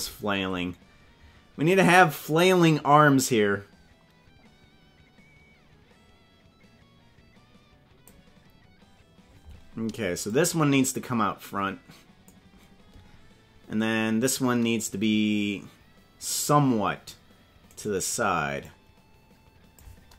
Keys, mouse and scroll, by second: 10.3-12.3 drag, 16.5 right click, 17.9 right click, 18.6-19.9 drag.